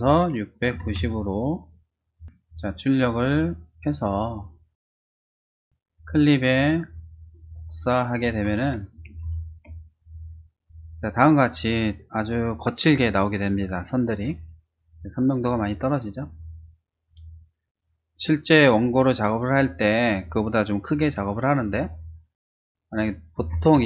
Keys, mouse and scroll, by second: 0.0-1.3 typing, 2.7 1, 5.5 click, 6.0 click, 6.4 click, 7.9 click, 8.5 ctrl+c, 8.8 click, 9.2 ctrl+v, 18.1 ctrl+n, 19.1 click, 23.1-23.8 typing.